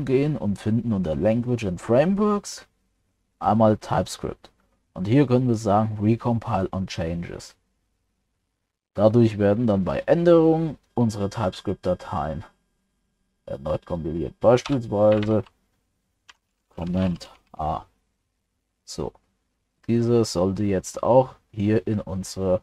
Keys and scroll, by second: 17.5 ctrl+s.